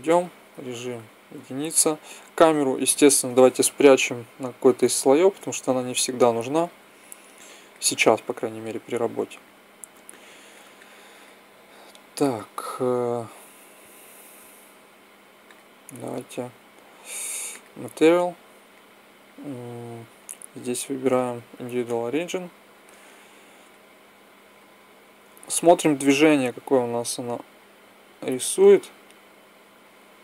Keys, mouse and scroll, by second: 0.8 KP_1, 2.7-4.2 drag, 4.5 m, 8.1 KP_1, 15.3-17.1 drag, 18.7-20.1 drag, 22.6-28.5 drag.